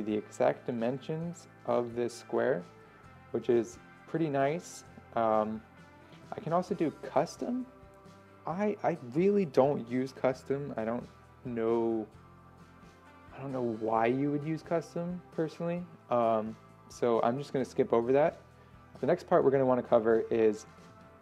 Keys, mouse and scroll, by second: 7.2-21.2 drag.